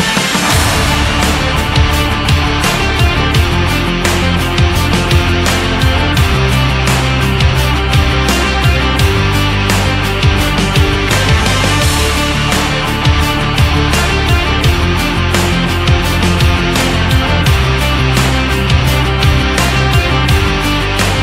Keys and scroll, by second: 6.1 ctrl+z, 15.1 Up, 18.1 Up.